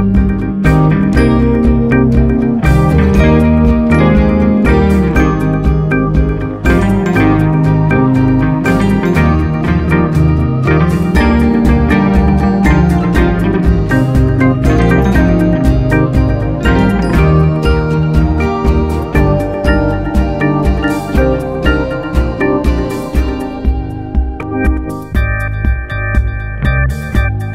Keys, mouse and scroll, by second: 2.2 g, 14.9-17.0 middle drag, 17.0 g, 23.3-24.9 middle drag, 24.9 g, 25.9 middle drag, 26.1 Tab, 26.6 click.